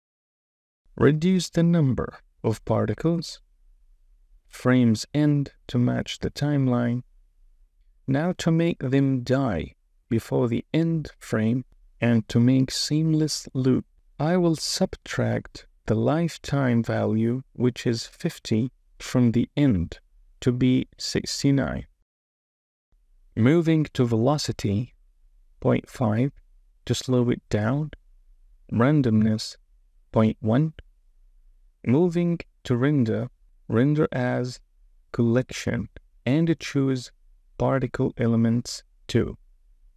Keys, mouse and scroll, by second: 0.1 space, 1.1-2.9 drag, 4.5-7.8 drag, 6.3 KP_1, 9.6 space, 13.9 space, 14.4-19.4 drag, 16.0 BackSpace, 20.3 space, 22.9 space, 23.9-27.3 drag, 28.6-30.7 drag, 33.8-35.6 drag, 38.6-39.7 drag.